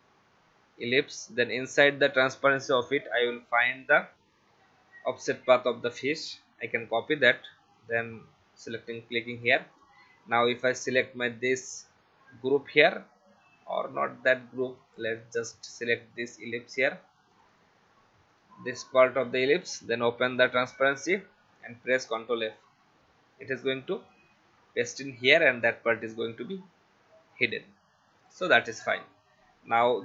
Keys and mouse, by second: 2.2 click, 3.3 ctrl+a, 6.7 ctrl+c, 7.8 click, 11.0 click, 14.8 click, 16.7 click, 17.3 click, 20.4 click, 22.0 ctrl+f, 23.6 click, 27.4 click.